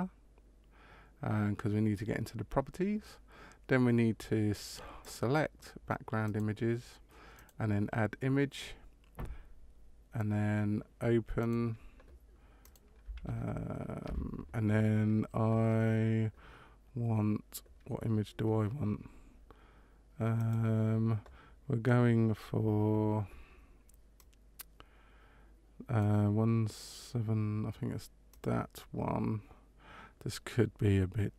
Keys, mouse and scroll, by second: 4.9 click, 6.2 click, 7.3 click, 11.3 click.